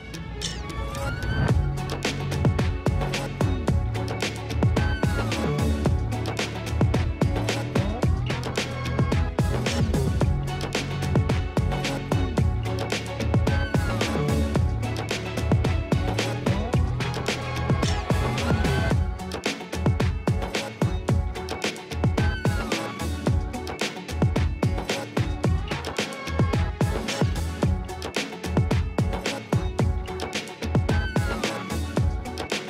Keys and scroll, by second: 1.1 [, 4.8 space, 11.2 space, 11.4 space, 14.0 space, 14.9 F9, 15.8 space, 16.2 ], 25.2 ], 27.2 [.